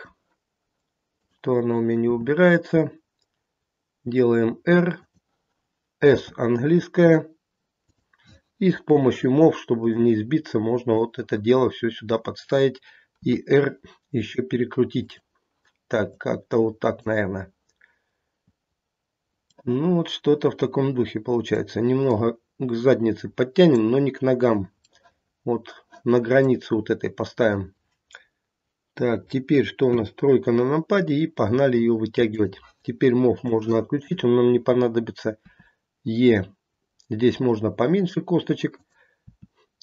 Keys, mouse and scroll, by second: 1.1 click, 2.0 r, 6.0 s, 8.9 click, 9.9 click, 13.2 r, 16.0 click, 19.5 middle click, 22.0 click, 24.8 middle click, 29.8 KP_3, 32.3 click, 33.4 click, 35.4 e, 39.2 e.